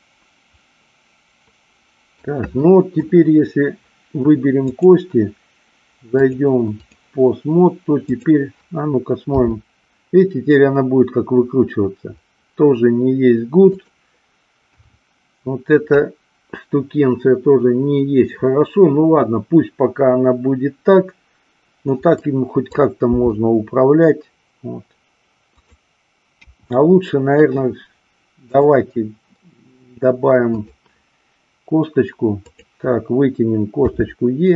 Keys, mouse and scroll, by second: 2.7 middle click, 4.8 click, 6.3-7.1 drag, 8.1-9.3 drag, 9.4 r, 13.8 click, 14.7 KP_1, 22.2 middle click, 23.1 r, 25.7 click, 26.3 KP_1, 28.5-30.7 drag, 32.4 click.